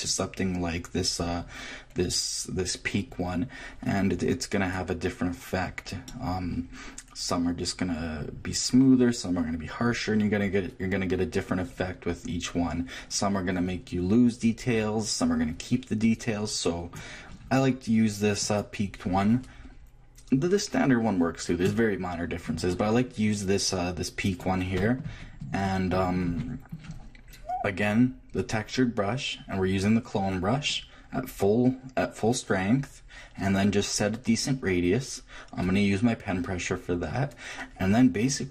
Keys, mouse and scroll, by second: 3.7 middle click, 4.7-8.2 drag, 18.4-20.3 drag, 24.4-26.0 drag, 38.3-38.5 scroll down 1.